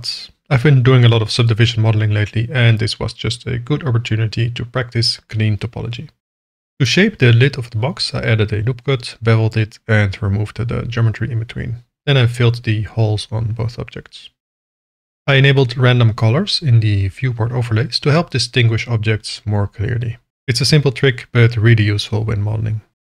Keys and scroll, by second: 0.9 k, 6.3 ctrl+r, 9.0 ctrl+b, 10.9 ctrl+b, 12.1 Tab, 12.2 2, 13.0 f, 13.6 Tab, 14.2 f, 14.8 alt+a, 20.5 ctrl+KP_Subtract.